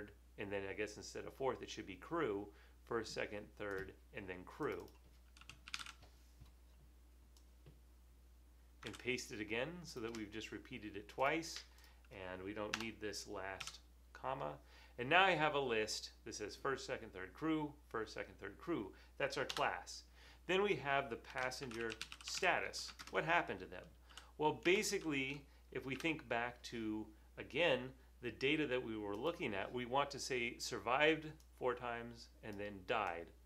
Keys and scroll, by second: 5.3-6.3 typing, 8.5 super+c, 9.1 super+v, 12.8 BackSpace, 13.7 ], 19.6 Return, 21.3-22.9 typing, 24.1-24.7 typing, 25.7-26.5 typing, 28.0-28.7 typing.